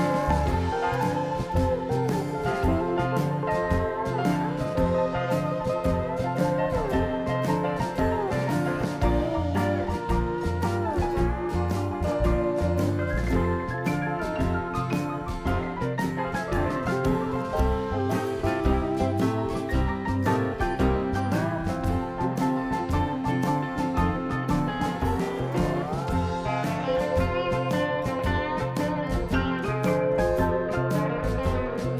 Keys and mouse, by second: 2.9 e, 7.9 Tab, 8.4-9.5 drag, 9.8-11.2 middle drag, 12.3 Tab, 14.2 ctrl+r, 15.9 ctrl+r, 18.2 ctrl+r, 20.4 ctrl+r, 23.2 Tab.